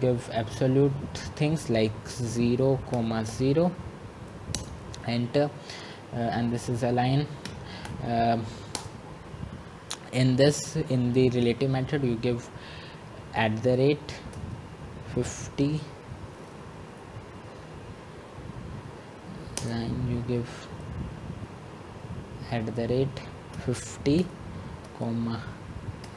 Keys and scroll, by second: 4.7-5.4 typing, 8.2 Return, 9.0 Escape, 13.7 Return, 18.5-19.2 typing, 19.8 Escape, 22.4 Return.